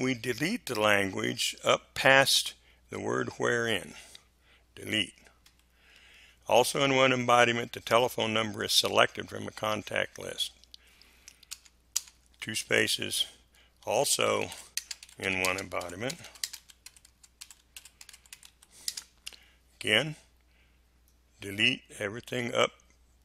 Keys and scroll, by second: 5.4 Delete, 11.4 space, 13.5-18.9 typing.